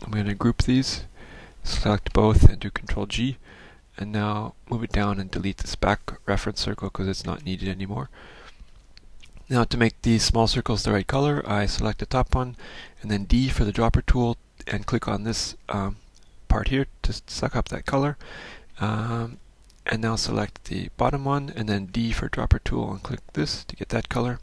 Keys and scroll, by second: 4.5 ctrl+g, 7.4 Delete, 13.5 d, 19.4 F1, 22.1 d.